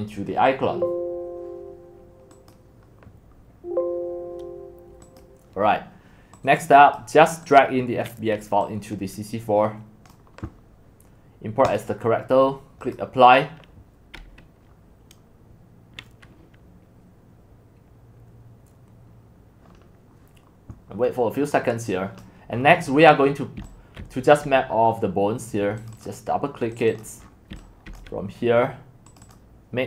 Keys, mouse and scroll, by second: 2.3 click, 3.5 click, 5.0 click, 6.4 click, 6.8 click, 9.8-11.2 drag, 22.2 click, 22.6-23.6 scroll down 26, 22.6 middle click, 23.6-24.0 typing, 24.3 click, 24.7-25.7 middle drag, 24.7-25.7 scroll down 6, 25.7 scroll, 25.9-27.2 drag, 27.2 scroll, 27.3-28.4 typing, 27.3 scroll, 28.0-29.8 drag.